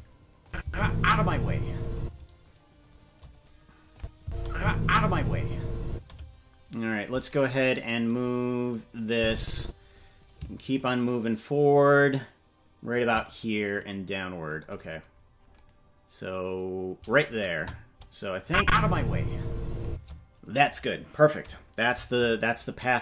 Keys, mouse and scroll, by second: 0.4 click, 0.6 space, 2.0 space, 3.9 click, 4.2 space, 5.9 space, 7.1-8.9 right drag, 9.1 click, 10.7-13.0 shift+drag, 13.7 click, 15.1-15.5 scroll down 3, 17.5 KP_0, 18.4 click, 18.6 space, 19.8 space.